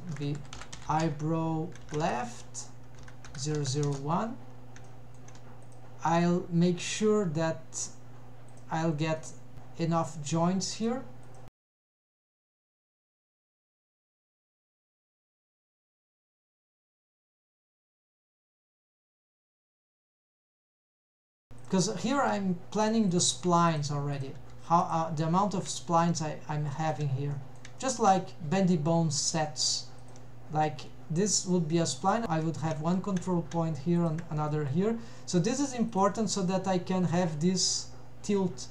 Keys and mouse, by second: 3.5 0, 4.9 shift+middle click, 5.7 click, 6.1 g, 9.2 middle click, 9.8 e, 10.8 click, 11.3 click, 12.0 e, 13.1 click, 13.4-14.1 middle drag, 14.7 drag, 15.0 g, 16.6 g, 17.8 middle click, 19.2 g, 20.0 click, 20.4 g, 21.6 click, 22.3 g, 23.1 click, 23.5 g, 24.2 click, 24.5 g, 25.8 shift+middle drag, 26.8 shift+middle click, 27.4 middle click, 27.9 shift+middle click, 32.1 click, 34.0 shift+click, 34.5 middle click, 35.9 click, 36.8 g.